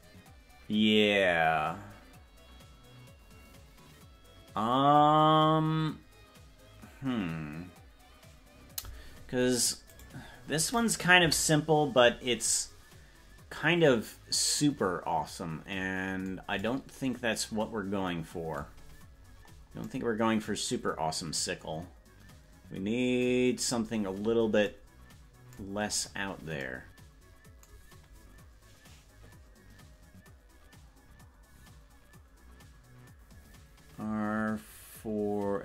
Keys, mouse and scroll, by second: 10.2 right click, 11.2 KP_Decimal, 18.8-19.8 scroll down 12, 23.6-24.6 scroll up 8, 25.8-26.4 scroll down 9.